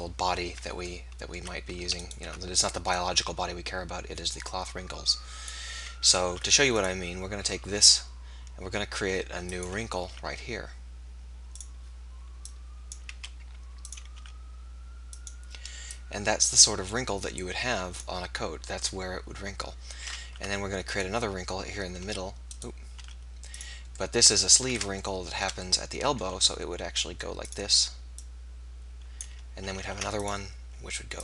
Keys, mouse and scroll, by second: 2.9 middle click, 3.3 middle click, 3.8 click, 6.4 ctrl+r, 10.0 r, 12.5-14.2 drag, 13.2 s, 14.2 r, 15.9-17.7 drag, 20.3 ctrl+r, 23.0 r, 26.3 r, 28.2-29.9 drag, 29.9 ctrl+r.